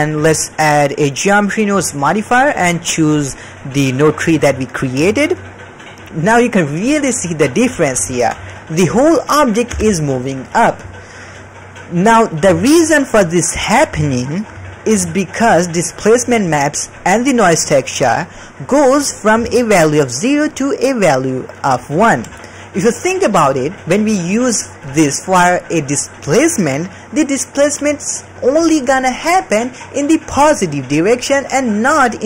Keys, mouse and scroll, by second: 0.2-1.8 drag, 2.6-4.5 drag, 5.1 shift+middle drag, 6.8 KP_1, 7.5-7.8 ctrl+middle drag, 8.1 shift+middle click, 8.6 m, 9.7 m, 12.5 shift+middle click, 14.0 shift+middle click, 14.6 ctrl+middle click, 15.4 middle click, 16.0 middle click, 17.3 middle click, 17.6 click, 17.9 click, 18.5 middle click, 18.7 middle click, 19.2 middle click, 19.3-21.6 d, 19.4 click, 20.2 click, 21.6 click, 22.1 d, 23.8 d, 24.9 click, 25.2-26.8 drag.